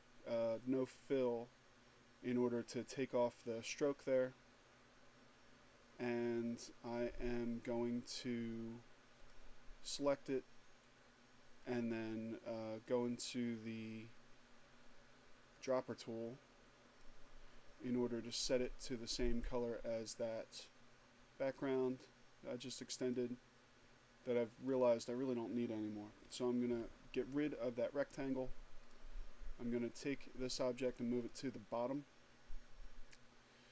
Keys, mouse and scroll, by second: 8.8 click, 11.3 click, 15.0 click, 18.2 click, 21.5 click, 22.8 click, 24.1 click, 26.2 Delete, 28.5 click, 30.8 click.